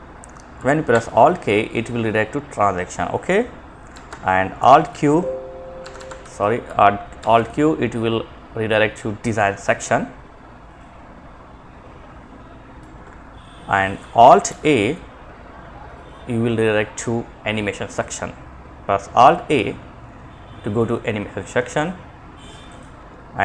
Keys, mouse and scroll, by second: 0.1 alt+k, 3.2 Escape, 4.2 alt+q, 5.1 Escape, 5.5 click, 6.4 alt+q, 12.0 Escape, 13.8 alt+a, 21.9 click, 22.9 alt+s.